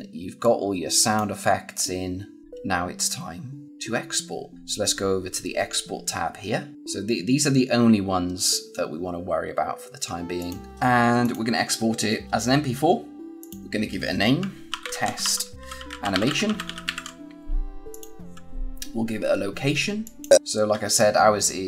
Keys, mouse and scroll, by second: 2.4 scroll down 1, 10.3 click, 11.1 click, 13.4 click, 14.3-17.3 typing, 17.8 click, 19.9 click, 20.3 click.